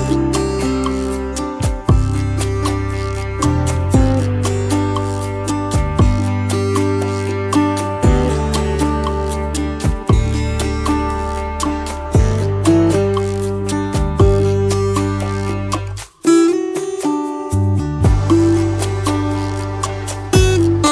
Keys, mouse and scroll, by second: 0.1 double click, 3.6 double click, 10.1 space, 11.6 double click, 11.7 space, 16.5 alt+scroll up 1, 18.1 space, 19.6 t.